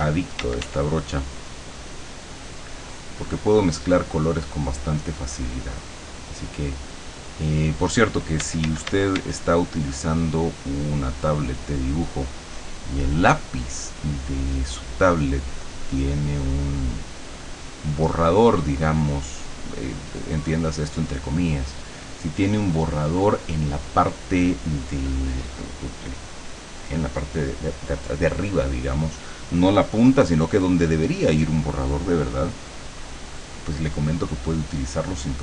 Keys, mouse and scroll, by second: 0.8-3.6 drag, 8.5 d, 9.5-12.1 drag, 12.3 scroll up 2, 13.9 click, 15.1-16.3 drag, 17.5 click, 18.9 click, 20.0-21.2 drag.